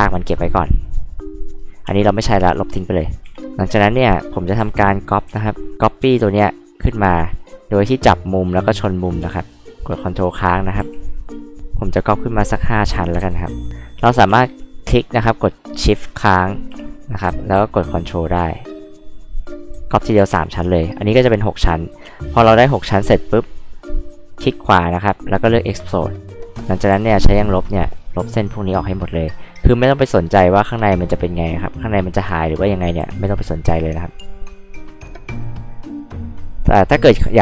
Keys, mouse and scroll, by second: 1.4 ctrl+click, 1.9 space, 2.1 click, 2.2 click, 2.4 click, 3.3 Delete, 3.8 click, 4.6 m, 5.2 h, 5.4-5.7 drag, 6.2 ctrl+click, 7.2-9.9 ctrl+drag, 10.4 ctrl+click, 10.8 h, 11.0-11.5 drag, 11.6 ctrl+click, 12.5 ctrl+click, 13.2 ctrl+z, 13.7 ctrl+click, 14.3 space, 14.6 click, 15.3 shift+click, 15.7 shift+click, 16.7 m, 17.6 ctrl+click, 19.2 ctrl+click, 20.2 h, 20.3 click, 22.0 space, 23.2 right click, 25.5 click, 26.1 click, 26.9 e, 27.1 click, 27.7 click, 28.2 click, 28.6 click, 29.0 click, 29.3 scroll up 2, 29.5-29.8 scroll down 2, 29.8-30.1 scroll up 4, 30.1 click, 30.6 scroll up 2, 30.9 click, 33.0 h, 33.2 drag, 33.3 scroll up 2, 33.6 scroll down 2, 33.6 e, 34.0 click, 34.6 click, 35.3 click, 36.0 click.